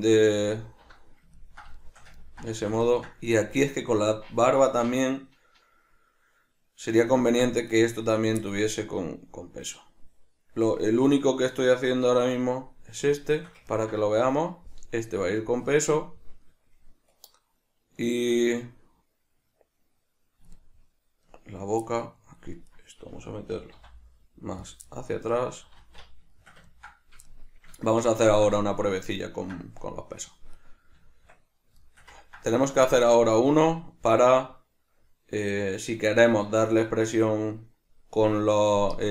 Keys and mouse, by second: 0.4 alt+q, 1.4-7.7 ctrl+middle drag, 7.7 right click, 8.5-22.7 shift+middle drag, 22.7 right click, 23.5 g, 24.7 click, 24.9-30.5 middle drag, 25.8 alt+q, 27.9 Tab, 30.5 right click, 30.9 Tab, 31.8 shift+middle click, 32.9 Tab, 32.9-39.1 middle drag.